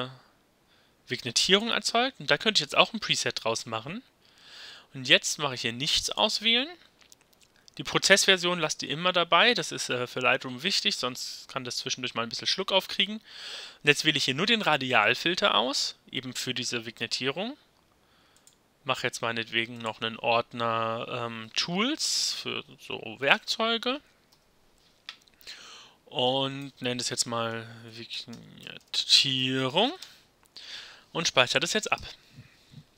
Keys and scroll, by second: 21.5-23.3 typing, 24.3 Return, 27.0-30.5 typing, 32.0 Return.